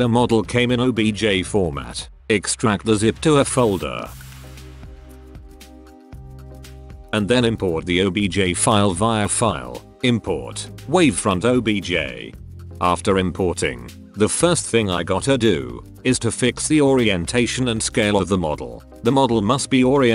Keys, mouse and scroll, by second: 16.1-16.9 middle drag, 17.0 middle drag, 17.3 middle click, 17.9-18.4 middle drag, 18.8-19.1 middle drag, 19.2 Tab, 19.6 click, 20.0 Tab.